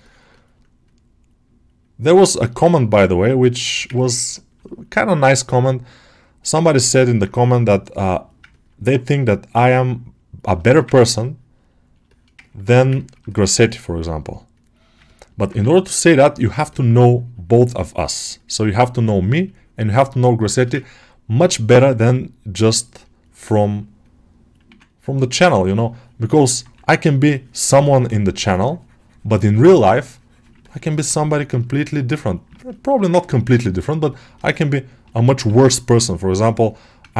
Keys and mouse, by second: 0.7 click, 2.3 shift+middle click, 2.9 click, 3.5 ctrl+alt+shift+middle click, 4.5 shift+middle click, 5.4 click, 6.5 ctrl+alt+middle click, 8.4 ctrl+alt+middle click, 10.5 alt+shift+middle click, 10.8-11.8 ctrl+alt+middle drag, 11.9 alt+shift+middle click, 12.3 ctrl+alt+middle click, 12.8 ctrl+alt+middle click, 13.2 shift+middle click, 14.9 ctrl+alt+middle click, 15.6 3, 15.8 click, 16.5 alt+middle click, 16.8-19.4 drag, 20.7 ctrl+alt+middle click, 23.9-25.3 drag, 26.3 alt+middle click, 26.7 right click, 27.2 right click, 27.6 right click, 29.2-30.4 drag, 30.5 ctrl+alt+middle click, 30.8 alt+middle click, 31.1 shift+click, 31.6 shift+click, 32.4 alt+shift+middle click, 32.8 alt+middle click, 32.8 alt+click, 33.1 ctrl+alt+middle click, 33.6 shift+click, 34.0 shift+middle click, 34.2 alt+middle click, 37.0 click.